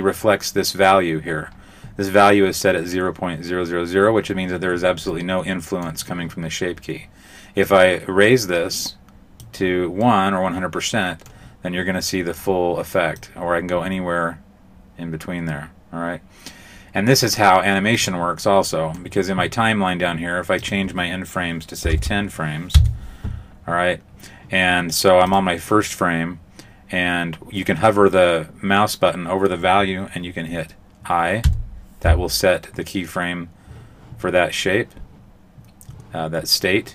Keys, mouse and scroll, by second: 5.1 middle click, 7.6 click, 10.1 middle click, 13.2 click, 18.7 middle click, 20.6 click, 25.3 click, 31.5 i.